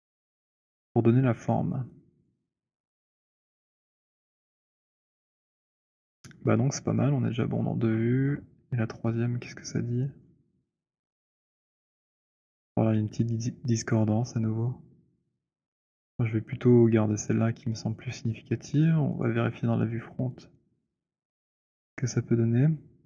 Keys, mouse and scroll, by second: 2.2 alt+click, 3.2 scroll, 3.9 scroll, 6.1 scroll, 6.9 scroll, 7.5-8.9 scroll, 10.0 alt+middle click, 10.4 alt+middle click, 11.0-16.5 alt+middle click, 12.1-12.6 alt+scroll, 19.3 click, 21.0-23.0 drag.